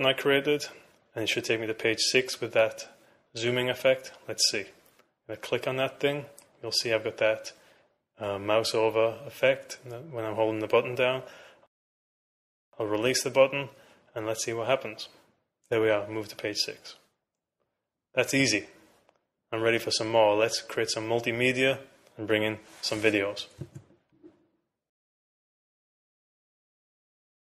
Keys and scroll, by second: 18.7 super+q.